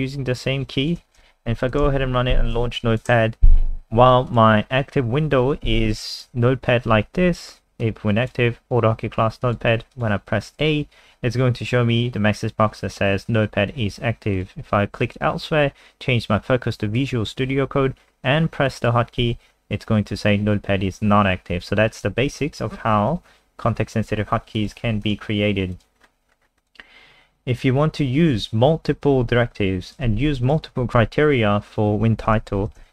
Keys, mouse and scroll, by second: 1.0 F5, 1.8 super+n, 2.9 alt+click, 4.3 click, 6.0 alt+click, 7.8 click, 11.0 a, 14.3 click, 19.2 a, 21.9 click, 24.8 alt+F4, 25.1 click, 26.0-26.6 scroll down 5, 27.3 scroll down 2, 29.0 click, 30.1 ctrl+c, 30.4 click, 30.9 shift+click, 31.9 shift+Right, 32.4 ctrl+v, 32.8 ctrl+s.